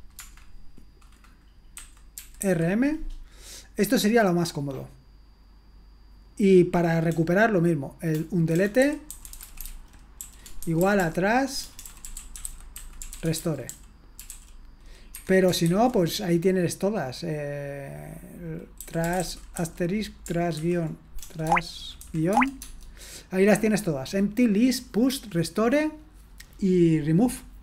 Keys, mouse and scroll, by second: 1.9-2.9 typing, 7.1-15.7 typing, 18.6-22.6 typing, 21.5 Tab, 22.3 Tab.